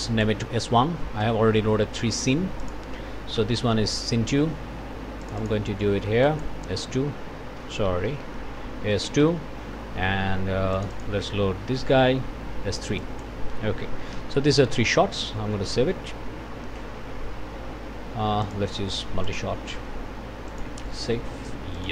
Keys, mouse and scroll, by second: 0.0 click, 0.4 s, 1.0 KP_1, 1.2 KP_Enter, 2.6 click, 3.4 1, 5.2 click, 6.2 click, 6.7 KP_1, 7.1 KP_2, 8.1 BackSpace, 9.0 KP_2, 9.2 KP_Enter, 10.7 click, 11.6 1, 13.0 click, 13.9 s, 14.1 KP_3, 14.8 KP_Enter, 15.6 ctrl+s, 18.4 click, 19.3 click, 20.5 click, 21.7 click.